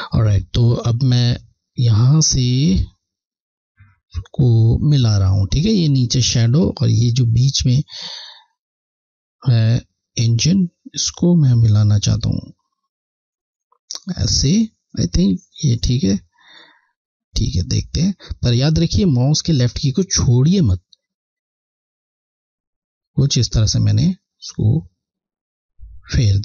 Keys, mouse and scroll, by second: 16.8 click.